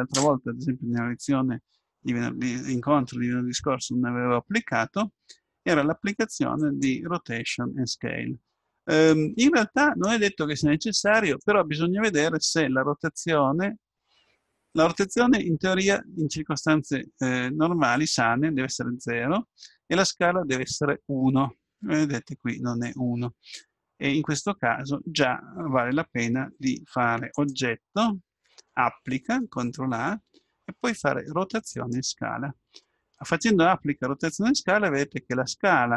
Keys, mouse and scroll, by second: 6.6-8.4 drag, 9.1-10.9 drag, 27.4-29.3 drag.